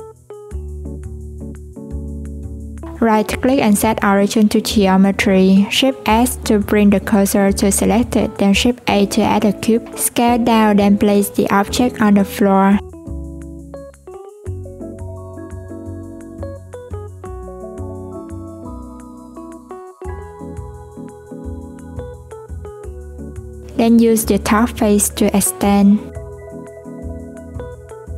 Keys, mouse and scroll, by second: 2.8 right click, 4.2 shift+s, 5.1 shift+a, 6.6 s, 10.2 click, 11.1-12.9 scroll up 2, 12.9 g, 16.1 scroll down 1, 17.2 click, 18.0 s, 19.0-19.7 scroll up 1, 19.7 click, 21.0-21.8 scroll down 1, 21.8 Tab, 22.3 alt+z, 22.5 click, 23.4 click, 24.9 click, 26.9 scroll down 1, 26.9-28.0 scroll up 1, 28.0 click.